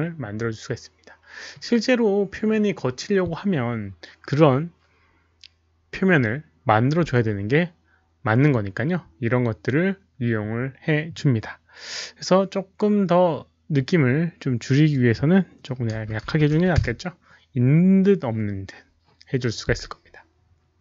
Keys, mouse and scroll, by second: 1.5 middle click, 1.6 scroll down 1, 12.7-14.6 middle drag, 14.6 click, 16.1 click, 16.1-16.5 typing, 16.5 click.